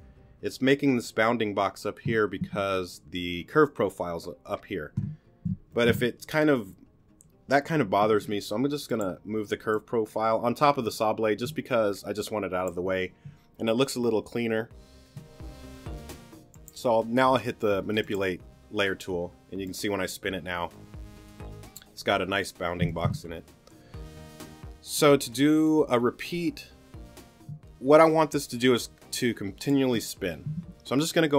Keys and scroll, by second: 8.1 t, 22.9 super+z.